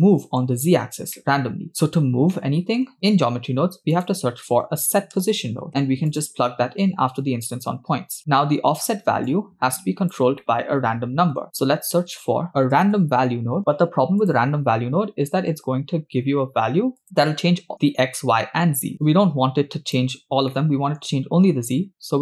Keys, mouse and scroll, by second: 1.4 middle click, 2.3-2.7 scroll down 3, 2.6 middle click, 3.2 shift+a, 5.7 BackSpace, 8.3 click, 9.5 click, 10.7 middle click, 12.1 shift+a, 17.0 middle click, 19.2-20.2 drag, 20.6 scroll down 2, 20.7-21.3 middle drag, 21.8 shift+a.